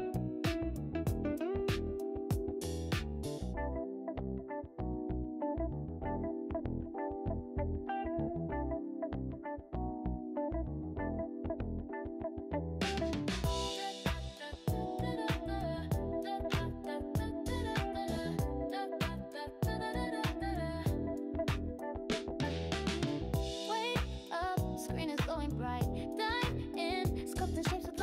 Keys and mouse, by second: 1.4 click, 2.7 g, 5.2 g, 6.5 click, 6.9 g, 8.7 click, 9.9 click, 10.8 g, 12.9 click, 13.3 g, 14.3 click, 15.3 click, 16.0 g, 16.7 click, 18.3 g, 19.3 click, 21.7 click, 23.3 g, 26.7 click.